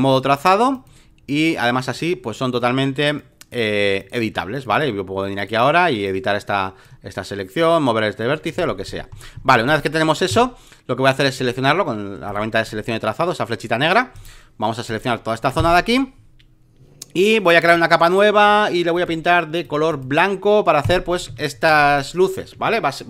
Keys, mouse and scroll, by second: 5.3 ctrl+click, 6.0 ctrl+click, 7.5 ctrl+click, 8.6 alt+middle click, 9.6 space, 9.6 click, 11.2-14.1 drag, 14.1 right click, 14.8 click, 15.5 Return, 17.6 click, 18.3 space, 18.9-21.1 drag, 21.2 ctrl+d, 21.7 space, 21.9 click, 22.5 alt+middle click.